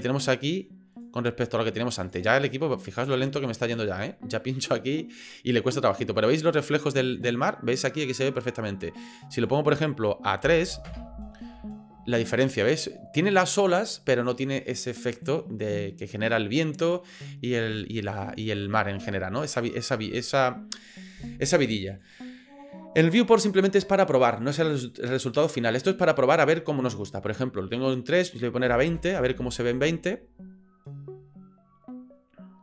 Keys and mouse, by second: 2.4 click, 9.4-11.5 drag, 21.9-32.6 drag.